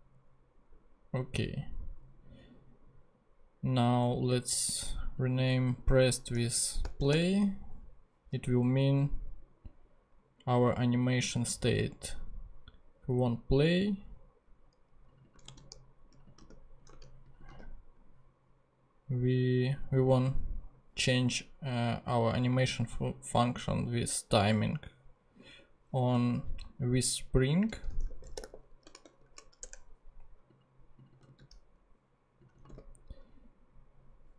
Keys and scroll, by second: 6.1-7.6 typing, 15.4 super+c, 16.4 super+v, 16.9 super+z, 17.5 super+v, 27.7-29.7 typing, 30.4 Return, 31.3 super+c.